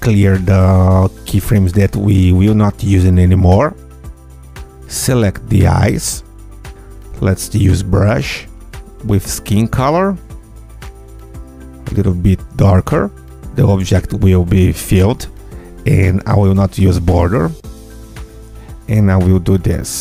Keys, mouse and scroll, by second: 0.2 click, 1.2 click, 2.8 ctrl+F2, 3.7-4.2 scroll up 1, 4.2 Tab, 4.2-4.7 scroll up 1, 4.7 click, 5.4 click, 6.6 ctrl+click, 7.7 click, 8.9 click, 9.5 click, 10.7 click, 13.3 click, 15.2 scroll down 1, 17.4 scroll up 1, 19.6 click.